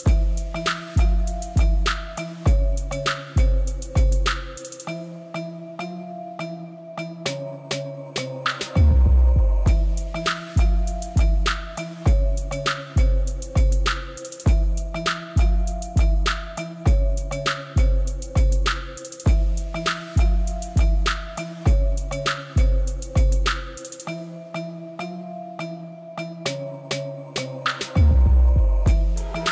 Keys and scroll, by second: 0.7 u, 2.3 u, 4.4 u, 5.4 u, 10.7 u, 14.6 u, 15.0 Tab, 16.4 Tab, 18.8 u, 20.2 u, 20.6 Tab, 22.5 u, 24.2 u, 26.2 u, 27.1 u, 28.2 u, 29.1 u.